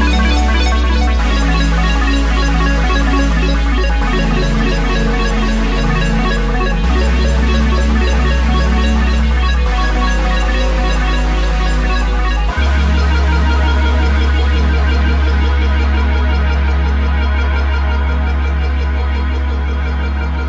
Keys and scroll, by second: 4.0 ctrl+u, 6.6 alt+f, 11.9 alt+f.